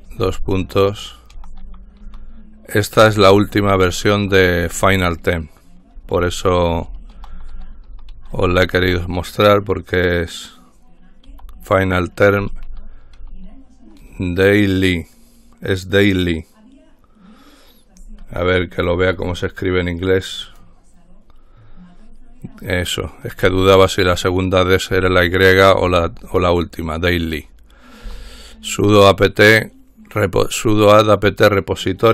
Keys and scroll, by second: 0.0-9.0 typing, 11.2-14.7 typing, 15.9 typing, 25.1 typing, 26.2-27.0 typing, 28.2 typing.